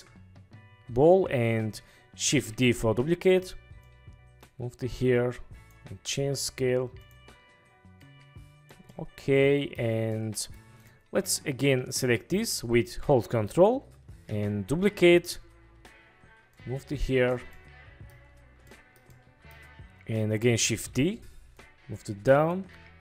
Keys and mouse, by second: 2.4 shift+d, 3.1 Escape, 6.0 s, 7.1 click, 8.1 click, 9.1-9.9 drag, 10.3-10.7 drag, 13.2-13.6 drag, 14.4 shift+d, 15.8 Escape, 17.8-18.3 drag, 18.8-19.1 shift+drag, 19.3 click, 20.6 shift+d, 20.9 Escape, 22.8 s.